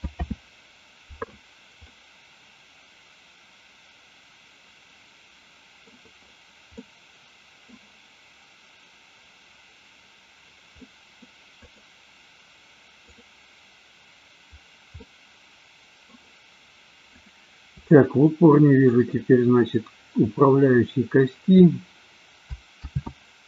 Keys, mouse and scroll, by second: 0.3 alt+r, 2.1-5.9 middle drag, 6.8-7.8 middle drag, 10.8-11.3 middle drag, 11.6-12.1 drag, 15.0-16.1 middle drag, 17.1 click, 17.9-19.0 shift+middle drag, 22.9 ctrl+z.